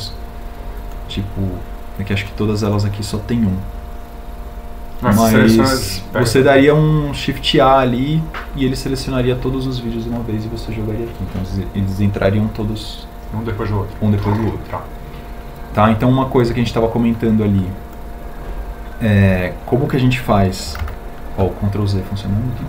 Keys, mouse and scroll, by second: 17.7 g, 22.1 ctrl+z.